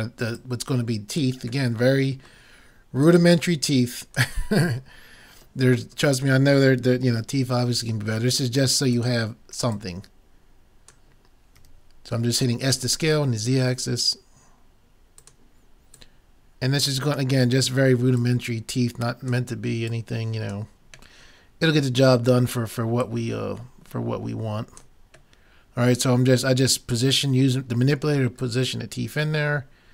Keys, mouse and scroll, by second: 0.4-2.1 drag, 1.8 middle click, 3.0-4.8 drag, 3.0 middle click, 4.8 middle click, 4.8 click, 7.0 s, 9.8-11.5 drag, 11.6 s, 16.0-17.8 drag, 18.2-21.7 drag, 21.2 middle click, 21.6 right click, 23.0-24.8 drag, 25.4 middle click, 27.2 middle click, 27.4-28.4 middle drag, 28.4-29.9 right drag.